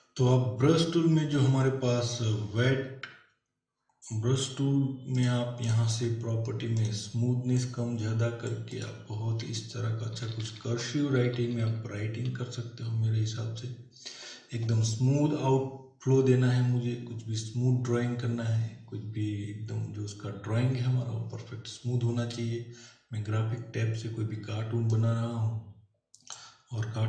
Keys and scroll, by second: 10.2 [.